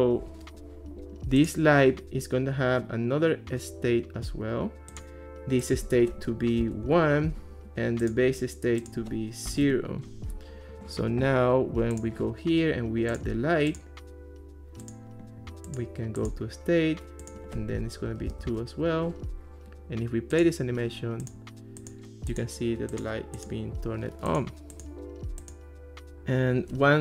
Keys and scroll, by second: 6.6 1, 6.9 Return, 9.5 0, 9.7 Return, 17.9-18.8 typing.